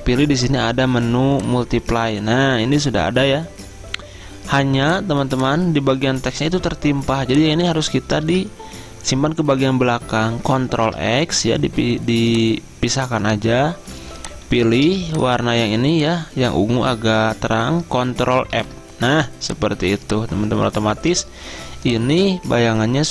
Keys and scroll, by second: 8.3 ctrl+z, 10.8 ctrl+x, 14.0-14.9 typing, 18.6 ctrl+f, 19.9 z.